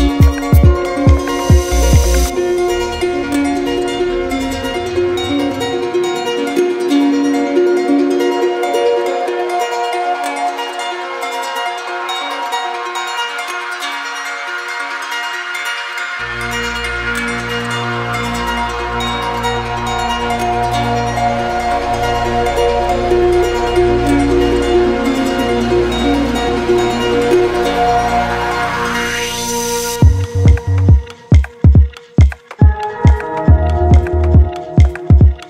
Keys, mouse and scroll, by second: 0.1-1.2 right drag, 1.4-2.5 drag, 4.0-5.1 drag, 7.2 click, 8.4 click, 9.8 z, 10.5 click, 12.4 ctrl+d, 13.0 ctrl+d, 14.6 click, 15.0 shift+click, 15.5 alt+click, 16.3 alt+click, 18.7 click, 18.8 click, 19.7 click, 21.9 click, 22.4 alt+click, 22.9 alt+click, 24.3 click, 27.0 click, 29.5 click, 30.9 click, 32.6 click, 33.8 alt+click, 35.1 alt+click.